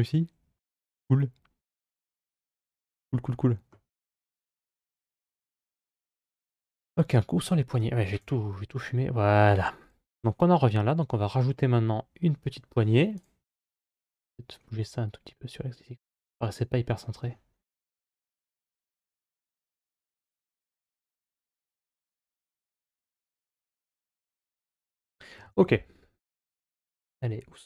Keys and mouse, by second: 2.1-3.5 middle drag, 4.4 Tab, 5.2-7.5 middle drag, 8.0 KP_Divide, 9.7-10.9 right drag, 13.7 g, 17.9 click, 18.9 g.